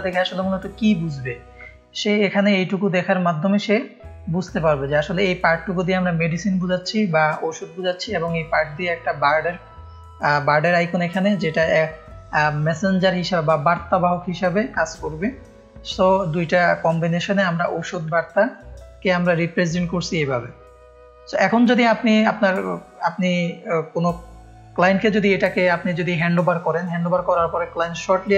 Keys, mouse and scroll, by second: 1.1 ctrl+space, 1.3 ctrl+click, 18.1 space, 18.2 click, 20.6 ctrl+space, 20.7 click, 21.7 click, 21.7 space.